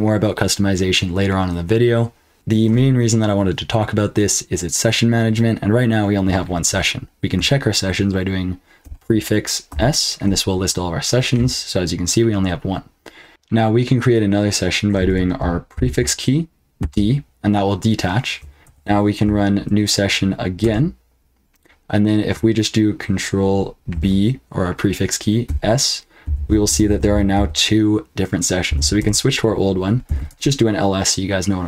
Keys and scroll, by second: 2.3 ctrl+p, 2.3 q, 8.8 ctrl+b, 9.7 s, 13.3 F12, 15.1 BackSpace, 15.7 ctrl+b, 16.8 d, 18.6 ctrl+p, 20.6 Return, 23.9 ctrl+b, 25.4-28.7 typing, 29.0 Return, 29.8-30.5 typing.